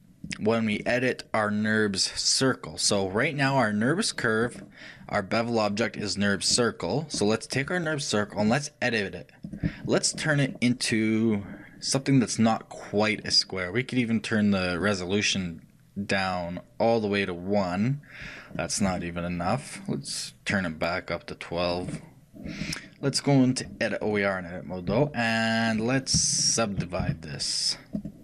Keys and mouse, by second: 0.3-2.1 drag, 8.5-10.3 drag, 8.5-10.1 right drag, 10.1-14.9 middle drag, 14.9-16.7 drag, 20.6-23.6 drag, 23.7 click, 27.1-28.2 shift+right drag, 27.1 w.